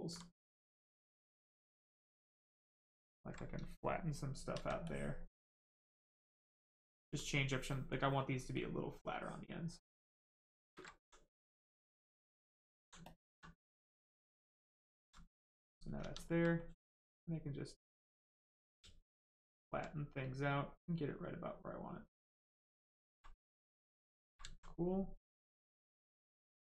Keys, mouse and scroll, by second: 0.4 click, 3.0 ctrl+click, 4.8 alt+click, 6.3 alt+right click, 8.5 ctrl+click, 10.9 alt+right click, 11.9 alt+click, 13.7 alt+click, 15.3 click, 16.0 ctrl+z, 16.5 click, 19.1 alt+click, 20.3 click, 23.2 right click, 23.9 ctrl+click, 24.4 alt+right click.